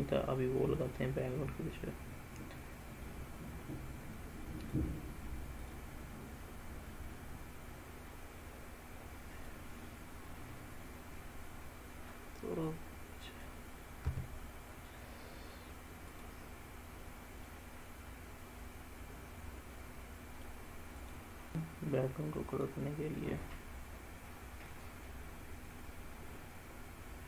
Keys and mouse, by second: 1.9-3.1 drag, 4.6 drag, 5.6 drag, 6.9-9.5 drag, 9.9-11.5 middle drag, 12.7 click, 14.1 s, 16.1 click, 17.5-20.5 middle drag, 21.0 click, 21.5-27.2 drag.